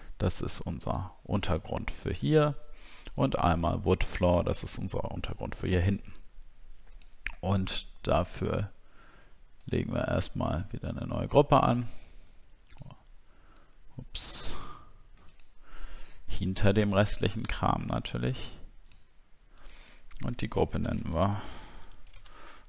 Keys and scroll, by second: 20.8 shift+f.